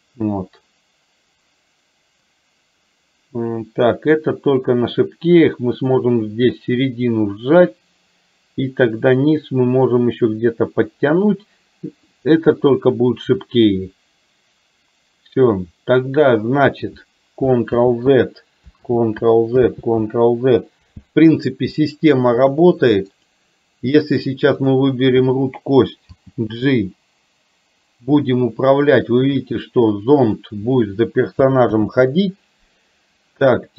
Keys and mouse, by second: 18.1 ctrl+z, 19.2 ctrl+z, 20.0 ctrl+z, 26.5 g, 32.1 ctrl+z.